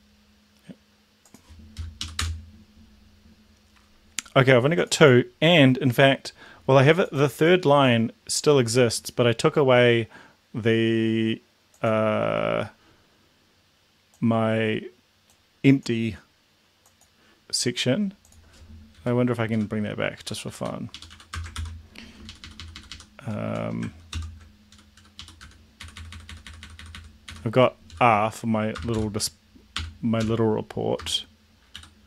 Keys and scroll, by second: 1.9 Up, 2.3 Return, 18.9 Up, 19.4 Home, 20.2 Down, 20.4 End, 20.8 Up, 21.0 End, 21.3 Return, 21.5 ctrl+v, 22.3 shift+Up, 23.4 shift+Home, 24.1 ctrl+/, 24.8 Up, 25.0 Down, 25.1 Up, 25.4 Down, 25.8 Delete, 25.9 Delete, 26.1 Delete, 26.4 Delete, 26.6 Delete, 26.8 Delete, 27.2 Delete, 27.9-30.9 typing, 31.8 End.